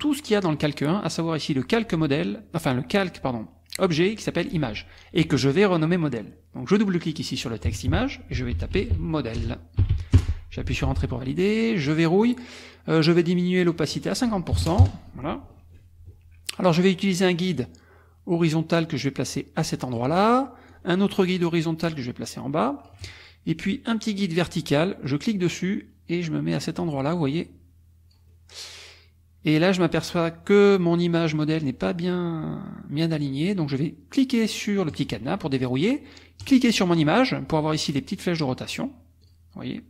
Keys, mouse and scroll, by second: 6.7 click, 8.1-10.4 typing, 11.9 click, 13.7 click, 14.5 KP_5, 14.7 KP_0, 14.8 KP_Enter, 17.5-20.1 drag, 20.7-23.0 drag, 26.3 click, 34.9 click, 36.4 click, 38.7 click, 39.2 click.